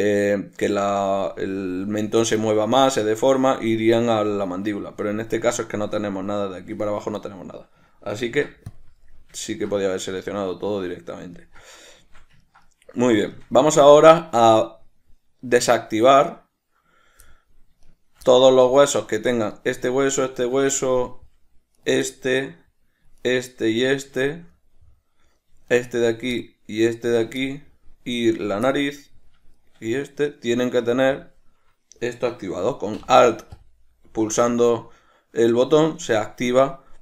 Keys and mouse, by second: 8.4 ctrl+p, 16.0 right click, 17.4 middle click, 18.0 shift+right click, 18.4-19.6 middle drag, 19.6 right click, 20.4 shift+right click, 21.0-22.0 middle drag, 22.0 shift+right click, 22.2-23.4 middle drag, 23.4-24.4 shift+right drag, 24.4-25.8 shift+middle drag, 25.8 shift+right click, 26.6 middle click, 27.2 shift+right click, 27.6 middle click, 28.5 shift+right click, 28.8 middle click, 29.7 shift+right click, 31.3 drag, 33.7 alt+click.